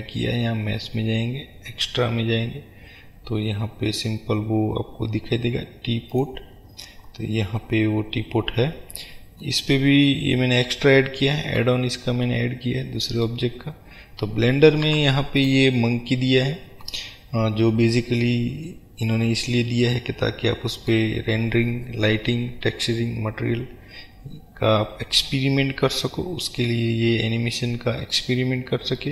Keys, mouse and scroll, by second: 7.2-7.6 scroll down 1, 7.6-15.5 middle drag, 10.6 scroll down 2, 12.0-12.4 scroll down 2, 13.5 scroll up 2, 15.0 Delete, 15.5 drag, 15.6-29.1 middle drag, 15.8-17.1 scroll up 2, 24.3-25.3 scroll down 2, 28.5-29.1 scroll up 2.